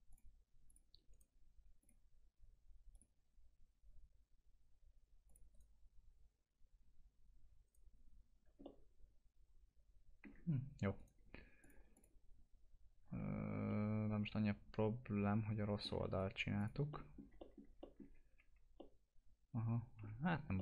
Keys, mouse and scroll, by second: 0.1 click, 1.1 right click, 1.8 click, 5.3 click, 5.5 right click, 11.0 right click, 11.6 click, 13.7-16.1 alt+middle drag, 16.1 right click, 16.6 click, 16.9 middle click, 18.1 alt+q, 18.8-20.3 alt+middle drag, 20.3 scroll up 1, 20.5 middle click.